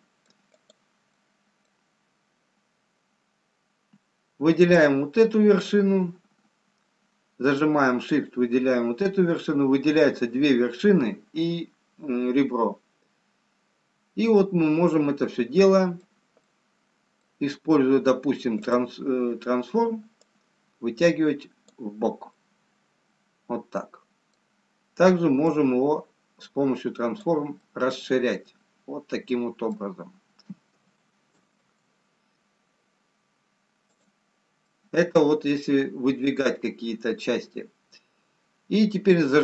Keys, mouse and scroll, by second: 0.6 click, 1.4 middle click, 2.5-2.8 scroll up 2, 3.3-4.0 scroll down 2, 4.6 click, 14.3 middle click, 17.0 middle click, 19.8 click, 20.5 click, 22.3 middle click, 25.5 click, 27.7 middle click, 31.6 ctrl+z, 34.0 click, 35.0 middle click.